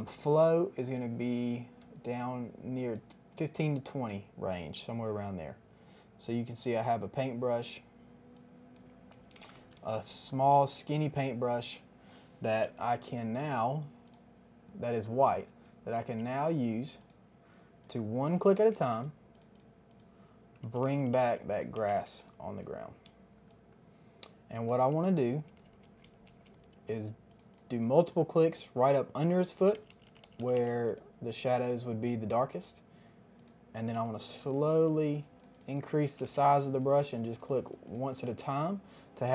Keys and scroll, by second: 9.3 KP_5, 9.3 KP_0, 9.4 Return, 9.8 space, 16.0 ], 18.7 [, 20.8-21.9 typing, 23.2 space, 25.1-26.3 typing, 29.6-30.5 typing, 34.4 [, 34.4 [, 34.6 [, 34.7 [, 36.0 ], 36.2 ].